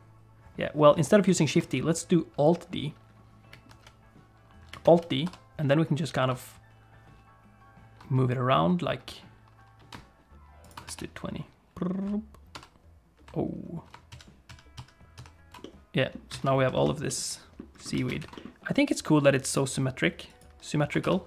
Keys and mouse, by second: 1.4 shift+middle click, 3.7 alt+d, 4.8 alt+d, 11.0 shift+r, 11.5 shift+r, 11.6-12.5 shift+r, 12.6 shift+r, 14.2 ctrl+z, 14.6 ctrl+z, 14.8 ctrl+z, 15.3 ctrl+z, 15.6 middle click, 16.1 click, 16.3 alt+a, 16.7 shift+click, 17.1 click, 17.3 middle click, 18.0 alt+a, 18.2 ctrl+s, 18.3 middle click, 18.9 click, 20.3 click, 21.0 ctrl+s.